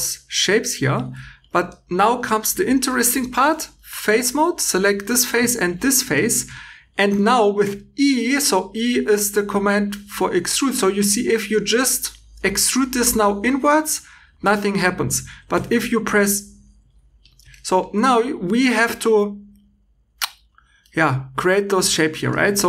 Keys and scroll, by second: 0.5 Escape, 14.9 Escape, 15.4 e, 16.8 Escape.